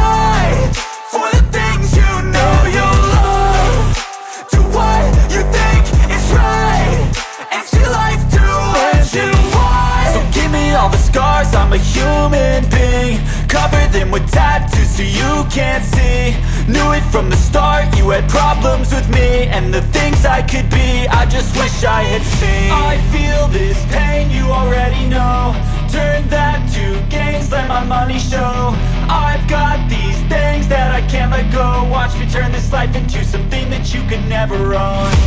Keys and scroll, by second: 0.0-3.0 typing, 3.3 Return, 3.5 ctrl+s, 12.6 Return, 12.6 Return, 12.8-16.1 typing, 15.2 End, 15.8 Return, 16.9 Return, 17.2-20.4 typing, 23.1 Return, 23.2 Return, 23.5-27.1 typing, 25.1 Right, 25.8 Return, 27.6 Up, 27.9 Return, 28.1-29.8 typing, 31.4 Return, 31.4 Return, 31.7-33.8 typing, 34.4 Return, 34.9-35.2 typing.